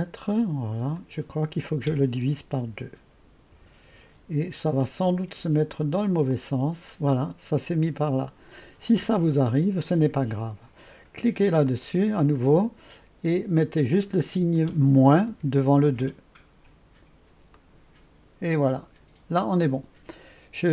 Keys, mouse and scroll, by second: 1.1 click, 2.7-3.6 typing, 6.4 click, 11.7 click, 14.0 click, 15.3 -, 17.6-18.7 drag.